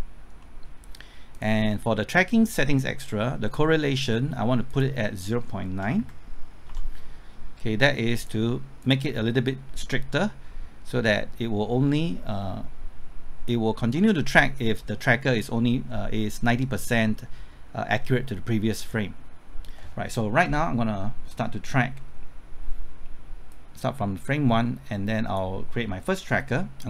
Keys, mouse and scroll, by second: 1.3 click, 1.7-3.9 scroll down 1, 4.7 click, 5.8 KP_0, 6.0 KP_Decimal, 6.7 KP_9, 8.2 click, 21.3 middle click, 22.0 scroll up 1, 23.5-25.6 drag.